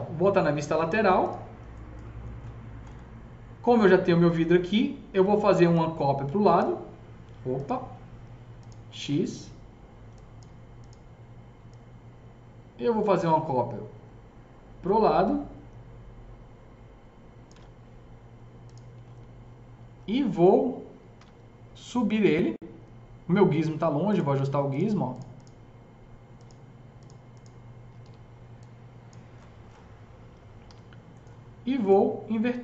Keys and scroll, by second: 21.2 e, 27.9 w, 30.7 e.